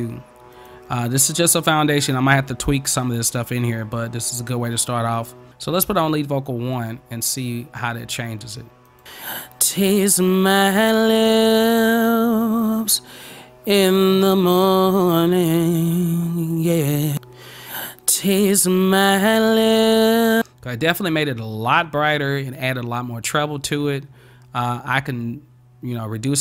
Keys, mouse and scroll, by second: 0.6 click, 6.8 click, 8.9 click, 20.3 click.